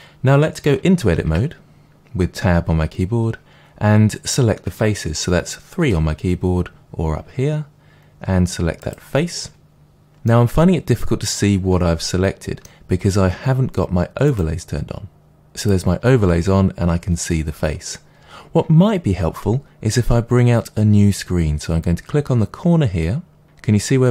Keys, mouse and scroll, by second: 1.5 a, 6.1 3, 8.8 click, 10.2-14.3 middle drag, 14.3 click, 15.6 click.